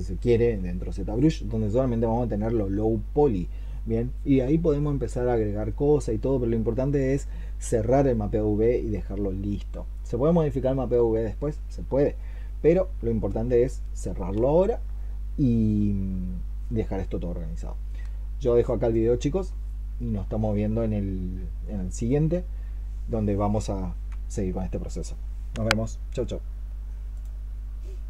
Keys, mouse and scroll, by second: 10.4-11.0 scroll down 5.